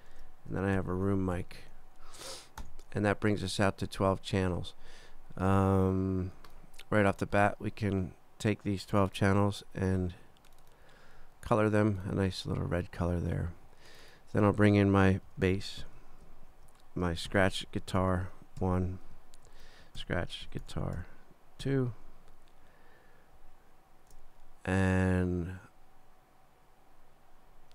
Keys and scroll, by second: 0.1 super+Down, 0.8 shift+super+r, 1.1 shift+o, 1.3 m, 2.6 Return, 15.0-16.3 typing, 16.5 super+Down, 17.0 shift+super+Down, 17.3 shift+super+s, 17.4-18.6 typing, 19.1 super+i, 19.5 super+Down, 20.0 shift+super+s, 20.2-21.6 typing, 22.1 super+2, 23.4 super+Down.